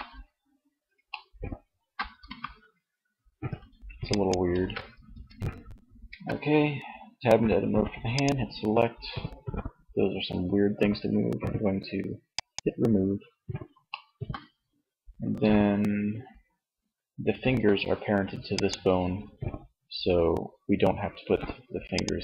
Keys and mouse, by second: 1.5 r, 4.1 ctrl+z, 4.2 Tab, 5.4 a.